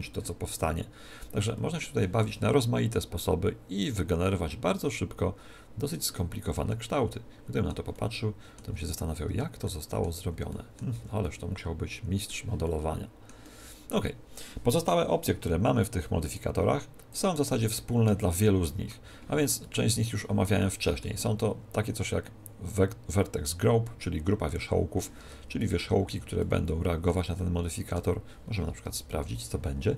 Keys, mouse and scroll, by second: 0.6-3.2 middle drag, 3.2 click, 6.6-8.8 middle drag, 8.8 Tab, 9.3 Tab, 9.7-10.8 middle drag, 10.2 z, 11.0-12.0 middle drag, 11.0 z, 12.2-16.4 middle drag, 16.4-19.1 drag, 19.6-22.3 middle drag, 25.2 Tab, 25.6-28.8 middle drag, 26.1 a, 28.8 KP_1, 29.1 middle click.